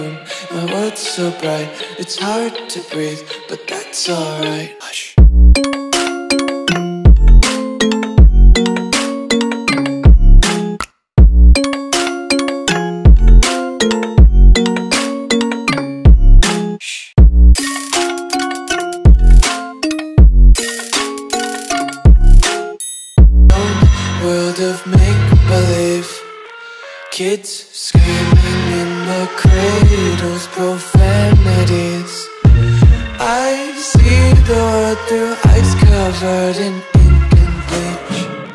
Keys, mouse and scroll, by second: 6.3 ctrl+a, 7.0 click, 12.9 ctrl+a, 14.8 click, 16.0 shift+click, 17.1 shift+click, 18.8 click, 19.6 Return, 20.4 alt+scroll down 1, 22.4 alt+scroll up 1, 23.1 alt+scroll up 1, 23.6 alt+scroll up 1, 24.2 click, 26.2-31.5 typing, 31.9 click, 33.0 a, 33.6 click.